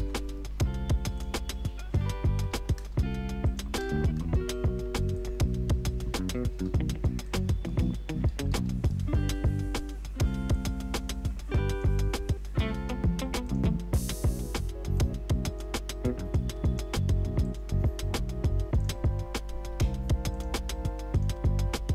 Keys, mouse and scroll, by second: 0.0-0.4 typing.